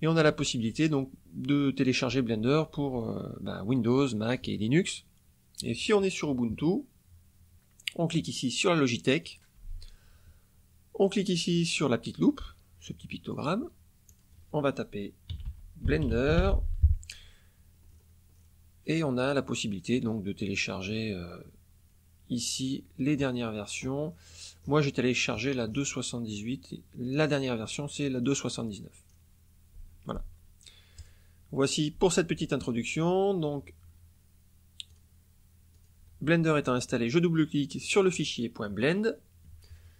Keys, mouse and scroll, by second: 9.2 click, 13.2 click, 14.0 click, 15.2-16.3 typing, 17.8-19.1 scroll down 5, 23.1-24.0 scroll up 3, 24.0-24.5 scroll down 2, 24.7 scroll up 2, 25.2-25.9 scroll down 4, 27.0 click, 28.2 scroll down 1, 29.0 scroll down 1, 30.9 click, 34.9 click, 35.7 click, 37.7 click.